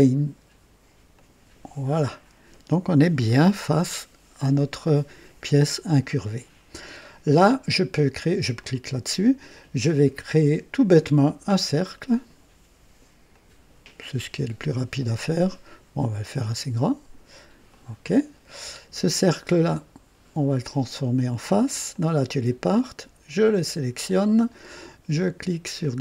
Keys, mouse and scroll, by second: 1.1 click, 8.6 click, 11.2 click, 13.3 click, 16.2 click, 17.7 click, 22.1 click, 24.0 click.